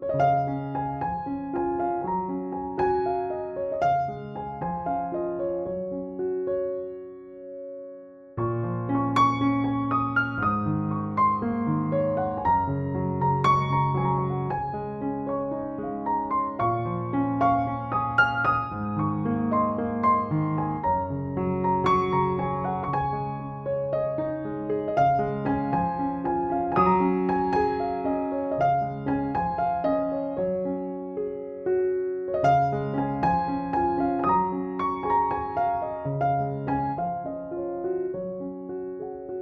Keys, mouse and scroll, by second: 0.1 ], 0.7 space, 1.0 click, 1.1-1.5 space, 2.1 click, 4.7 ctrl+-, 5.4 ctrl+-, 7.0 ctrl+=, 10.1 click, 10.2 ctrl+click, 10.5 ctrl+e, 11.2 ctrl+=, 12.5 ctrl+=, 12.9 space, 13.1-13.5 click, 13.7 ctrl+j, 14.1 ctrl+u, 14.9-15.4 click, 17.1 alt+click, 17.3-19.3 typing, 19.0 click, 19.4-20.8 drag, 21.1 [, 21.8 ], 22.0-22.5 drag, 26.2 ctrl+-, 27.8 click, 28.9 ctrl+click, 29.1 ctrl+e, 30.0 ctrl+j, 30.9 alt+t, 31.8 click, 34.8 click, 35.2 ctrl+=, 35.8 click, 39.2 click.